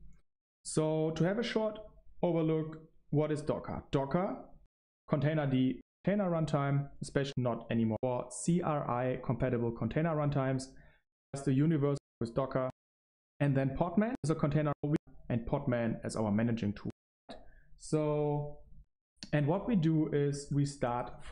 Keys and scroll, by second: 16.8 Right, 17.2 typing, 18.5-19.2 typing.